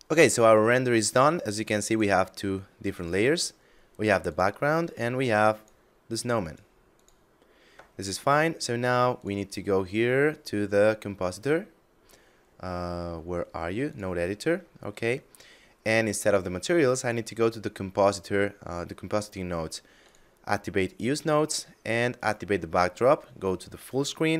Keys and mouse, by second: 1.3 click, 8.6 click, 13.2 click, 14.5 middle click, 16.4 click, 19.4 click, 21.5 click, 22.5 shift+space.